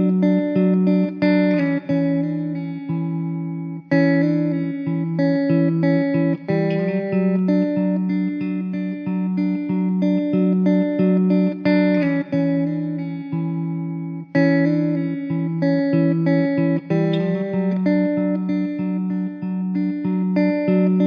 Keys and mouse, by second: 1.1 alt+middle click, 4.2 alt+w, 7.5-7.9 typing, 11.3 typing.